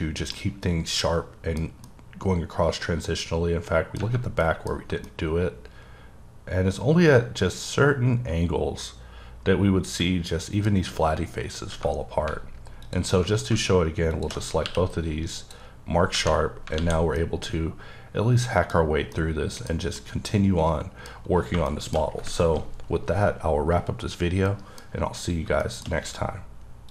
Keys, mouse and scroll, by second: 0.4 middle click, 1.9 middle click, 4.4 middle click, 5.1 middle click, 12.9 alt+click, 13.5 alt+shift+click, 14.4 alt+shift+click, 14.7 q, 15.4 click, 16.8 alt+a, 17.2 middle click, 18.9-19.2 scroll down 1, 19.2 middle click, 19.7 scroll down 2, 20.0 middle click, 21.5 shift+middle click, 22.1-22.8 scroll up 1, 22.9-24.5 scroll up 1, 24.5 middle click, 24.9-25.4 scroll down 2, 25.7 middle click.